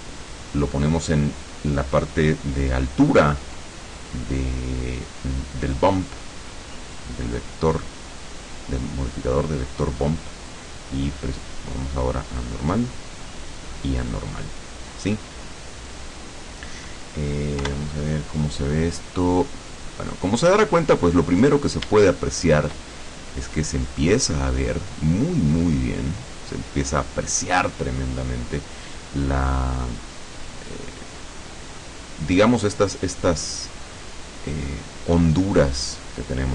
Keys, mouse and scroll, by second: 1.8-3.0 drag, 3.3-4.0 drag, 6.7-8.8 drag, 10.0-11.4 drag, 12.3-13.9 drag, 17.7 F12, 21.3-21.8 scroll down 1, 22.1 shift+click, 23.2-24.6 shift+scroll up 3, 25.0-25.8 scroll down 4, 26.6-27.1 scroll up 2, 27.4-27.7 scroll down 2.